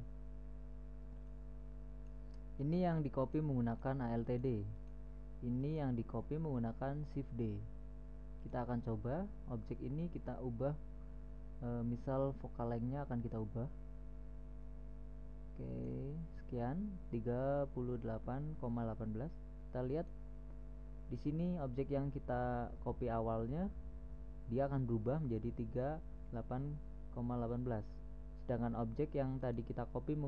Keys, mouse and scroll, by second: 1.6 click, 3.1-3.4 middle drag, 3.4 right click, 3.5 middle click, 3.7-7.6 right drag, 8.9-10.5 right drag, 13.7-15.3 right drag, 15.4 middle click, 20.4-21.9 right drag, 22.1-29.9 middle drag, 29.9-30.2 right drag.